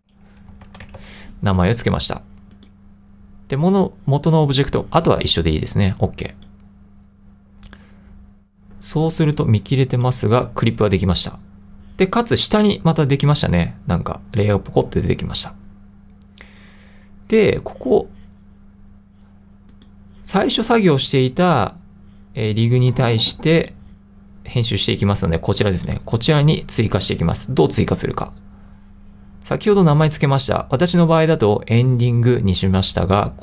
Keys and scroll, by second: 0.0-1.5 typing.